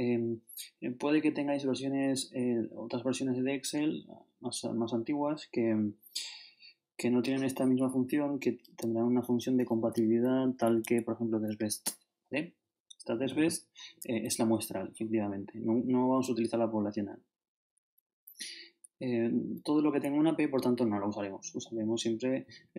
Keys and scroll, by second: 8.7 shift+BackSpace, 10.3 shift+Down, 15.6 shift+Down, 17.6 shift+Up, 19.5 shift+Up.